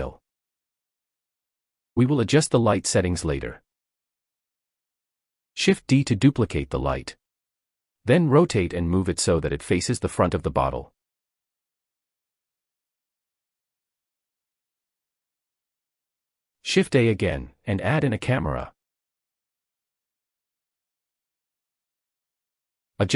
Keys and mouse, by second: 1.1 click, 2.4 click, 5.2 shift+d, 6.9-8.9 typing, 9.4 Return, 10.5 g, 11.4 y, 12.7-13.1 middle drag, 14.2 g, 14.5 x, 15.5 click, 17.9 shift+a.